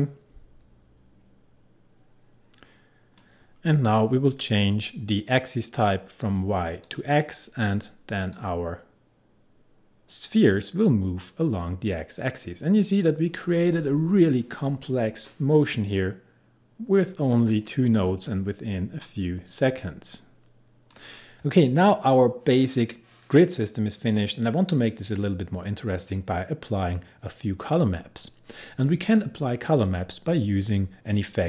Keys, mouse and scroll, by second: 19.1-21.3 drag.